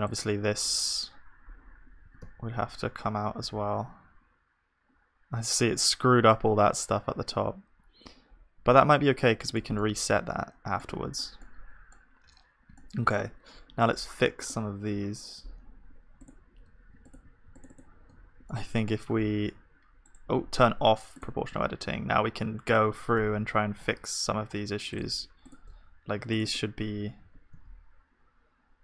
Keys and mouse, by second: 0.1-2.1 drag, 2.1-7.6 middle drag, 2.1 g, 14.5-19.7 drag, 14.5-18.1 middle drag, 19.0-21.5 middle drag, 19.5 r, 21.5-23.1 drag, 21.5 r, 25.4-28.5 drag, 27.2 r.